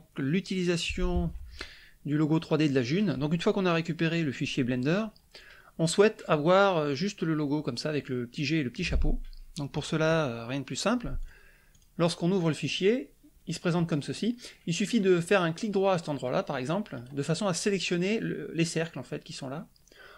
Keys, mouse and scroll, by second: 11.2 click, 11.7 click, 16.9 right click.